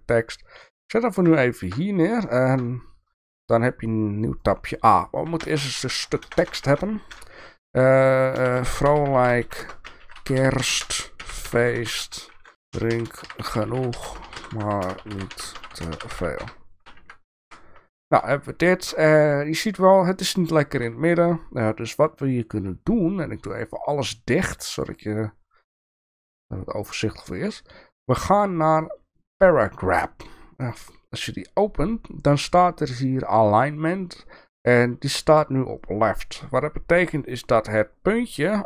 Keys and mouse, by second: 1.6 middle click, 2.5 shift+middle click, 4.4 click, 5.4 Tab, 6.2 BackSpace, 6.4 BackSpace, 6.6 BackSpace, 6.7 BackSpace, 8.4-17.0 typing, 12.5 Tab, 12.5 shift+Return, 17.4 Tab, 18.7 shift+middle click, 23.7 click, 24.7 drag.